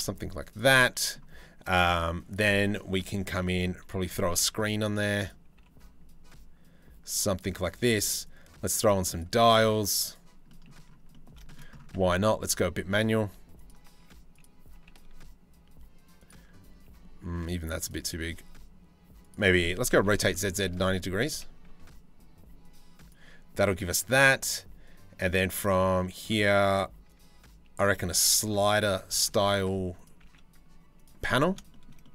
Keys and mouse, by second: 0.4 click, 2.6 click, 4.0 s, 5.2 g, 9.1 s, 10.1 middle click, 10.8 shift+middle click, 11.6 g, 13.6 s, 14.4 g, 17.0 s, 19.5 r, 20.9 g, 27.8 s, 28.7 g, 30.9 middle click, 31.3 shift+middle click, 31.7 middle click.